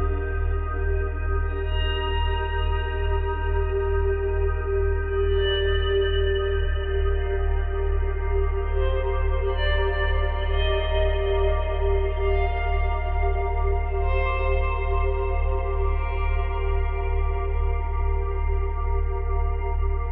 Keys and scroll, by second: 14.1 Delete, 15.4 Delete, 19.0 Delete.